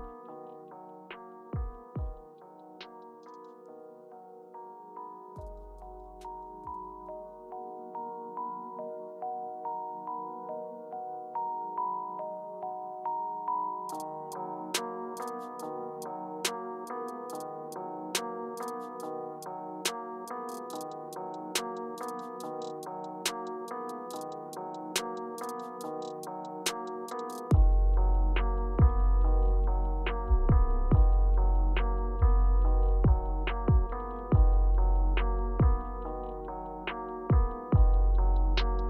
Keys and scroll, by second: 0.7 space, 6.3 Return, 9.9 Page_Down, 11.2 Page_Up, 11.7 Return, 13.2 Left, 17.1 Right, 17.3 Right, 18.3 Up, 19.3 Down, 21.0 Return, 21.7 Page_Down, 22.8 Left, 22.9 Up, 24.0 Return, 25.7 Page_Up, 36.1-36.7 scroll up 1, 36.7-37.5 scroll up 1, 37.5-38.0 scroll down 1.